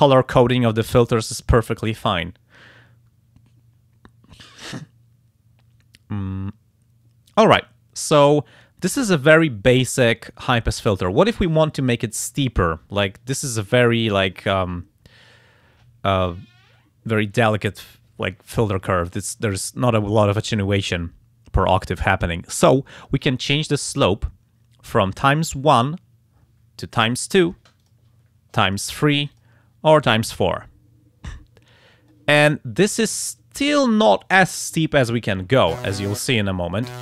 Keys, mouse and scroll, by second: 13.3-14.4 drag, 25.4 click, 27.1 click, 27.8 click, 28.7 click, 29.3 click, 30.0 click, 32.1-34.0 drag.